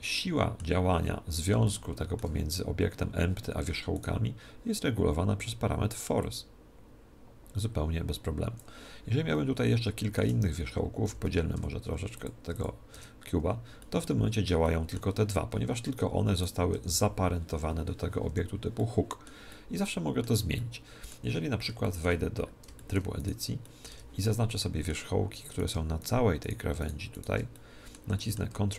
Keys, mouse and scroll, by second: 4.0-5.9 right drag, 6.2 click, 9.3 Tab, 11.0 a, 11.2 a, 11.6 w, 12.5 w, 13.0 Tab, 13.8-16.5 middle drag, 16.4 right click, 16.8 g, 18.8-25.9 middle drag, 23.2 right click, 23.9 Tab, 24.6 right click, 25.6-28.7 right drag, 27.6-28.7 middle drag.